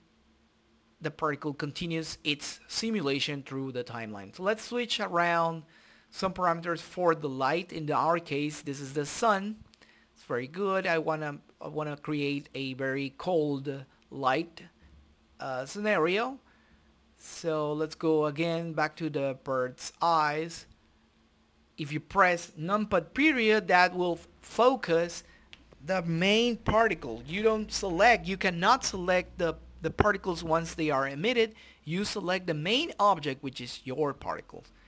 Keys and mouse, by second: 2.0-3.9 drag, 3.9-11.0 drag, 11.3 click, 12.8 click, 13.7-15.0 drag, 15.0 middle click, 15.2 right click, 15.7-17.2 middle drag, 17.2 click, 18.0 middle click, 18.5 KP_Decimal, 22.9 middle click, 26.3 click, 27.2 shift+F3, 34.3 click, 34.7 click.